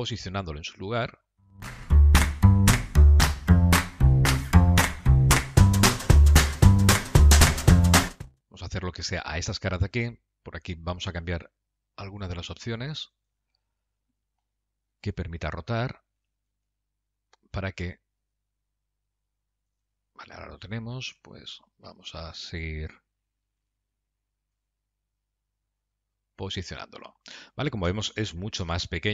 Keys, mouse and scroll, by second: 2.4 middle click, 3.8 g, 4.9 g, 7.7 middle click, 9.4 middle click, 10.1 scroll up 4, 13.4 click, 16.3 g, 21.3 g, 23.9 g, 27.3 middle click, 28.8 KP_Decimal.